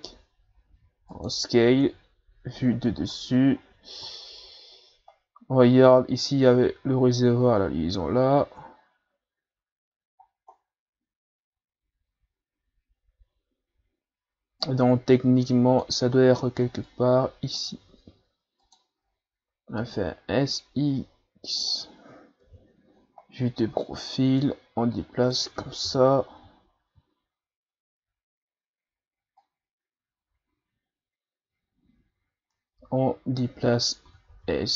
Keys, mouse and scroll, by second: 0.1 s, 1.8 KP_7, 3.0-5.1 shift+scroll up 9, 7.7-8.6 scroll down 6, 8.6-9.1 scroll up 1, 11.4-11.7 scroll down 1, 14.6-16.1 drag, 16.1-16.9 scroll up 3, 16.9-17.9 drag, 17.9 s, 19.0-19.7 scroll up 1, 19.7 scroll up 2, 19.8 s, 22.4 KP_3, 24.0-25.8 drag, 25.8 KP_7, 29.4-32.4 drag, 34.1 s.